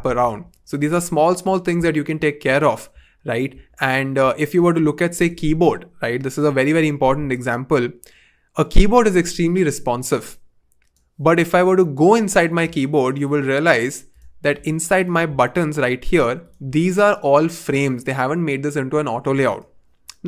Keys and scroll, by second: 6.7 v.